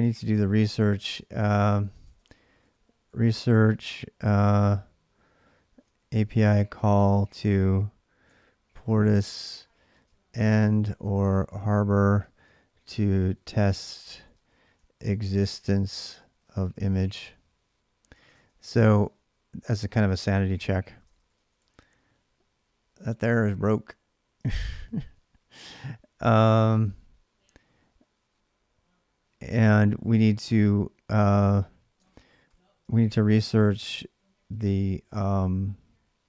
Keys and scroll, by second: 0.6-3.9 typing, 5.5-19.4 typing, 20.7 ctrl+[, 20.9-21.4 typing, 21.1 Return, 24.1-24.9 typing, 26.2-26.6 typing, 31.6-34.9 typing.